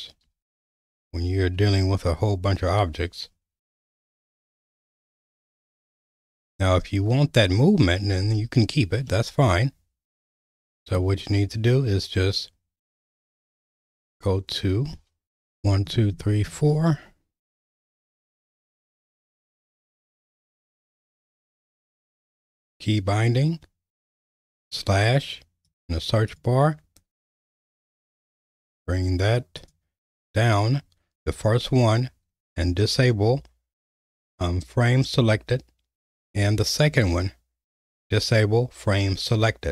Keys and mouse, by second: 4.7-6.0 middle drag, 9.1-11.0 middle drag.